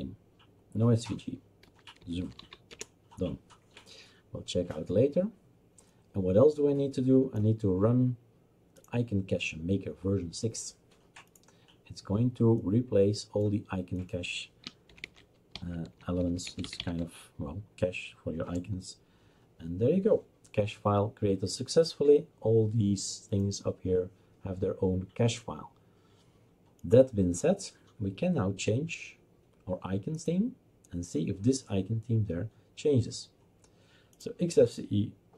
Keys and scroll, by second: 1.4-2.9 typing, 14.7-17.3 typing, 18.5 Return.